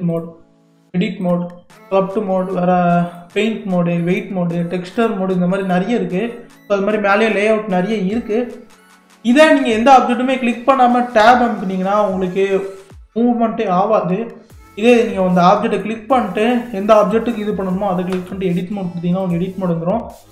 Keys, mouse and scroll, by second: 9.4 click, 10.1-11.2 scroll down 2, 11.2 Tab, 15.7 click, 18.1 Tab, 19.2 click.